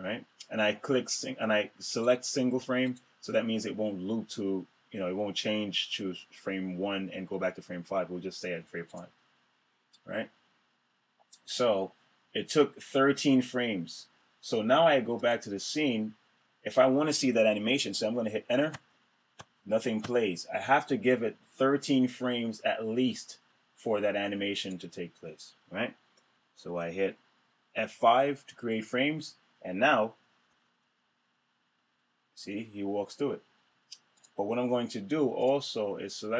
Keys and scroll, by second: 18.3 Return, 28.3 F5, 30.0 Return, 32.6 Return.